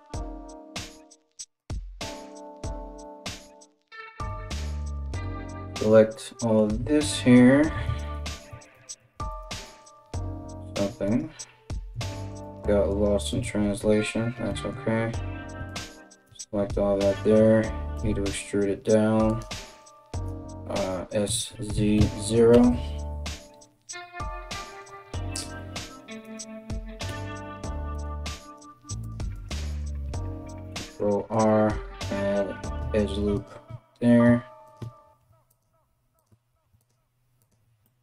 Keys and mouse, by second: 1.2-19.0 drag, 3.9 KP_1, 7.5-8.6 ctrl+z, 8.9 alt+middle click, 8.9 alt+right click, 10.3 middle click, 10.3 right click, 10.6 middle click, 10.6 right click, 11.6 shift+middle click, 11.6 shift+right click, 12.0 shift+middle click, 12.0 shift+right click, 12.5 shift+middle click, 12.5 shift+right click, 13.0 alt+q, 15.1-28.0 alt+middle drag, 15.3 alt+right click, 15.8 KP_1, 17.5 e, 19.8 s, 25.8 right click, 26.6 g, 28.0 right click, 28.2 middle click, 28.2 g, 28.9-38.0 right drag, 29.3 click, 29.3 middle click, 30.1 ctrl+r, 35.0 ctrl+r.